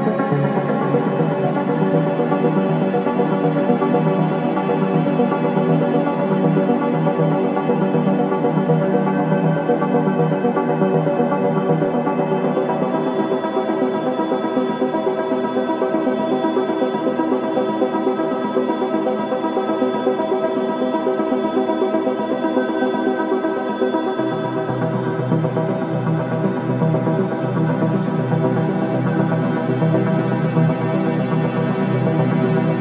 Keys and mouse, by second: 4.9 click, 6.1 r, 14.4 click, 16.3 click, 18.8 g, 24.8 g, 31.4 click.